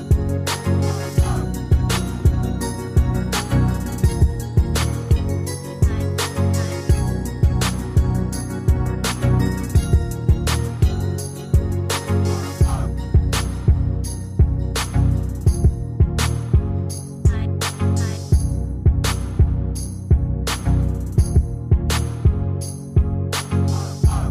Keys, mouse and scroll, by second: 1.9 Delete, 4.3 ctrl+g, 5.4 shift+click.